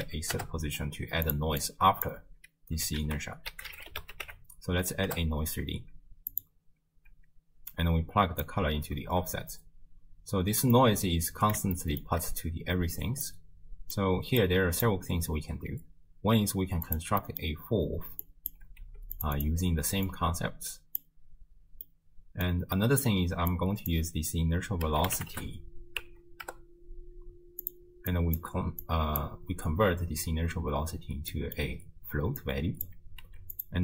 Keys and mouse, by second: 1.7 click, 3.0 ctrl+a, 7.7-8.5 drag, 9.1 shift+space, 10.9-11.6 drag, 10.9 space, 11.9 shift+drag, 13.2 middle click, 14.4 click, 16.9 click, 17.3 middle click, 18.3-18.6 drag, 18.9 g, 19.4 click, 20.1 click, 21.9 middle click, 22.8 middle click, 23.5-27.7 drag, 28.1 click, 28.9 click, 31.3 middle click, 32.4 click, 33.3 g.